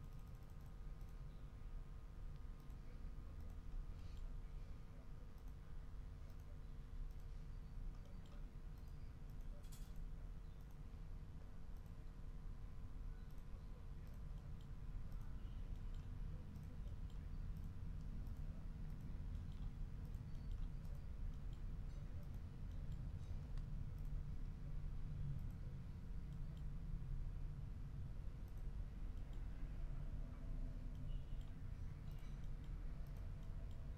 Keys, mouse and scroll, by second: 1.0 click, 2.5 click, 3.3-3.7 scroll up 1, 3.7 click, 4.0 middle click, 4.3-5.3 drag, 5.3 scroll up 1, 5.6 click, 6.2 scroll up 1, 7.0 click, 8.0 click, 8.7 click, 9.2 click, 9.8 click, 10.5 click, 11.7 click, 12.6 ctrl+scroll up 2, 13.2 ctrl+click, 14.0 click, 14.3 click, 15.1 click, 15.7 click, 16.5 click, 16.8 click, 17.5 click, 18.2 click, 18.8 click, 19.3 middle click, 20.0 click, 20.8 click, 21.3 click, 22.2 click, 22.7 click, 23.4 ctrl+z, 23.9 ctrl+click, 25.3 click, 26.3 click, 28.4 click, 29.1 middle click, 29.2 ctrl+scroll up 1, 29.5 ctrl+scroll down 1, 30.5 ctrl+scroll up 1, 30.9 ctrl+middle click, 32.1-32.8 ctrl+scroll up 4, 33.0-33.9 ctrl+scroll up 5.